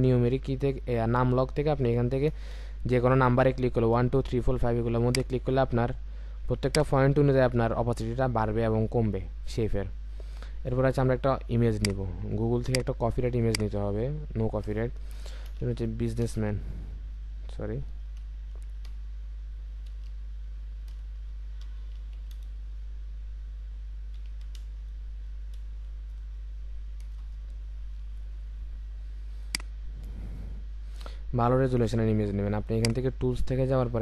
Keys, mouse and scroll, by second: 5.6 5, 5.7-6.6 alt+scroll up 1, 6.6 ctrl+click, 16.5 BackSpace, 17.4 BackSpace, 18.9-22.1 typing, 24.2-24.6 typing, 27.0 Return.